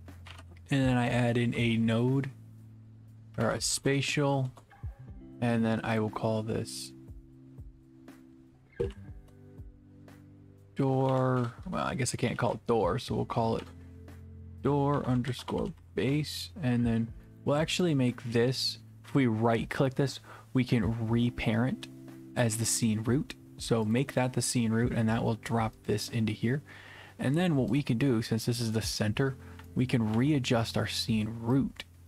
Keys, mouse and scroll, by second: 0.0-0.9 typing, 2.2-3.3 scroll, 3.3 scroll up 10, 3.3-3.9 typing, 3.4 scroll down 10, 4.5 Return, 6.5 click, 8.3-9.7 typing, 10.2 click, 11.1 Right, 11.4 BackSpace, 12.3 d, 12.5-13.2 Right, 13.6 BackSpace, 15.0-16.3 typing, 17.4 right click, 17.9 right click, 23.9 click, 25.9 click, 27.8 click, 28.7 click, 29.3-30.6 typing, 30.6 right click, 31.3-31.7 scroll down 1.